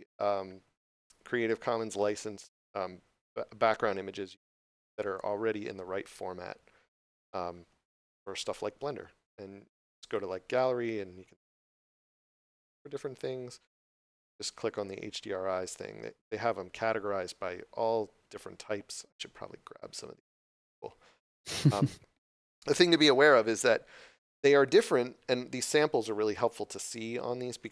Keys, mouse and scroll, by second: 5.8 scroll down 1, 7.1 scroll up 1, 11.6 scroll down 1, 12.3 scroll up 1, 13.8 click, 18.0 scroll down 1, 22.5 scroll up 1.